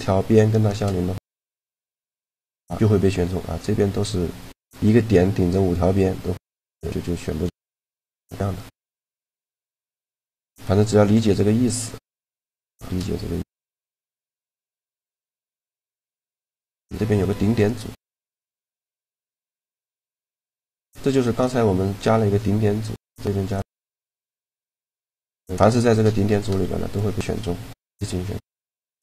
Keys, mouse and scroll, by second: 0.1 shift+g, 3.1-5.0 middle drag, 6.3 middle click, 10.8-13.2 drag, 11.4-13.1 right drag, 12.4 shift+g, 13.2 right click, 13.4 middle click, 15.2 a, 15.9 shift+g, 18.2-20.0 right drag, 18.5 shift+g, 25.3-27.0 right drag, 26.0 shift+g, 28.5 a.